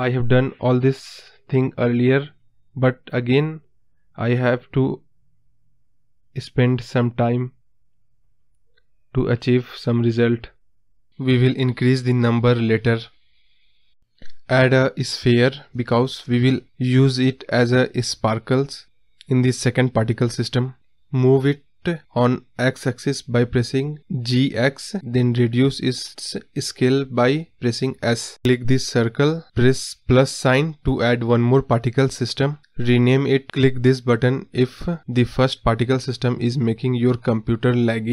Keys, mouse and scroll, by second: 5.5 space, 8.2-8.7 scroll up 2, 8.8-9.1 scroll down 2, 10.3 space, 11.5-22.6 drag, 22.6 shift+a, 23.0-23.9 scroll down 3, 23.9 s, 25.6 g, 26.9-27.6 scroll up 2, 27.6 click, 30.2-33.2 drag.